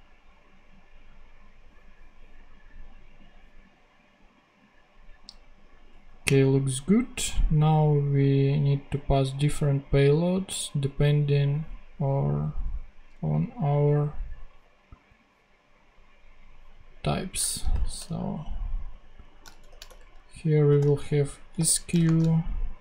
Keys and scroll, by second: 17.6 shift+9, 19.5-21.4 typing, 19.7 shift+Return.